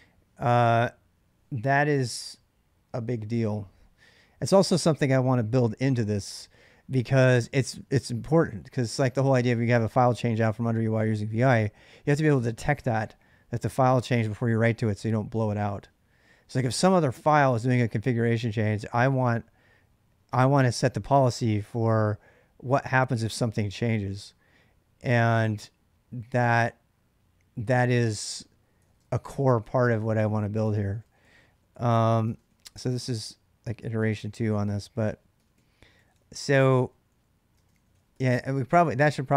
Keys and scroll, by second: 28.5-39.3 typing, 30.4 ctrl+[, 32.0 ctrl+[.